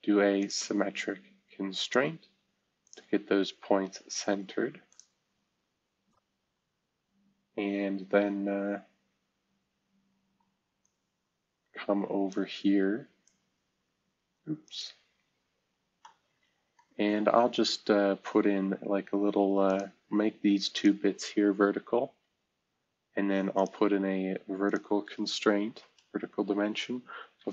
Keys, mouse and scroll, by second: 0.3 click, 1.8 click, 4.8 click, 6.1 Escape, 6.4 v, 8.1 scroll down 1, 8.6 scroll down 1, 9.2-10.7 scroll up 2, 15.1-15.8 scroll up 1, 22.0 v, 25.2-26.1 typing, 27.3-27.5 typing.